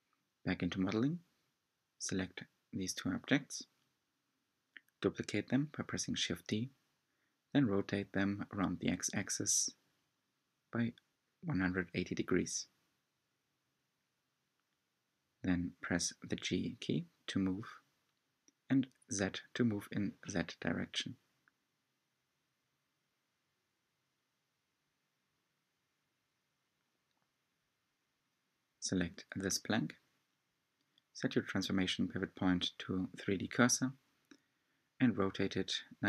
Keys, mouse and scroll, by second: 1.3 drag, 2.1 shift+click, 2.6-4.2 middle drag, 4.2 shift+d, 11.3-13.5 middle drag, 13.5-14.0 scroll down 1, 14.0 scroll down 2, 14.2-15.5 middle drag, 15.5 g, 20.2-21.6 middle drag, 21.6 scroll up 5, 21.8-23.1 shift+middle drag, 23.1 drag, 23.7-26.4 middle drag, 26.4 scroll down 2, 26.6-28.3 middle drag, 28.3 click, 28.9-29.2 scroll down 4, 29.2 middle click, 30.2-32.2 drag, 32.2-33.5 middle drag, 33.5 r.